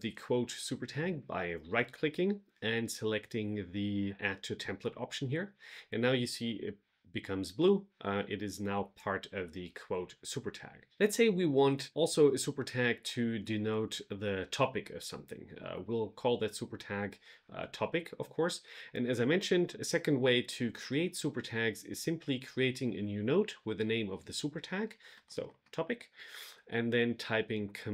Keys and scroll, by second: 27.4 super+k.